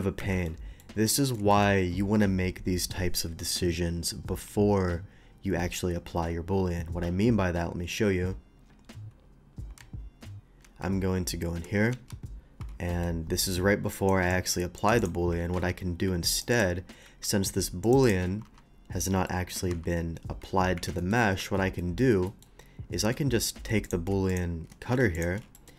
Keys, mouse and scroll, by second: 0.2 Escape, 0.4 middle click, 1.2 middle click, 1.5 middle click, 1.8 middle click, 9.8 ctrl+z, 10.3 ctrl+z, 12.9 middle click, 13.9 click, 14.3 click, 14.7 click, 15.0 click, 15.4 alt+v, 16.3 click, 16.5 click, 17.2 q, 17.8 click, 18.0 click, 19.2 middle click, 19.2 g, 20.7 Escape, 21.0 middle click, 21.4 Tab, 21.8 middle click, 22.2 middle click, 23.0 a, 23.2 a, 23.8 click, 23.8 a, 24.3 shift+click, 25.1 ctrl+alt+click, 25.5 ctrl+alt+middle click.